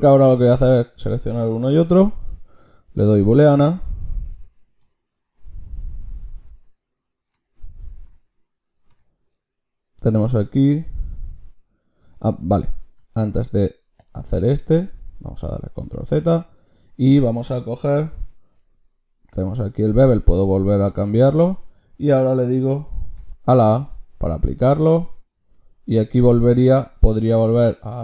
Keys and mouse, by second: 0.2-1.7 middle drag, 1.7 ctrl+shift+q, 15.3 ctrl+z, 16.0-18.1 drag, 18.1 ctrl+shift+q.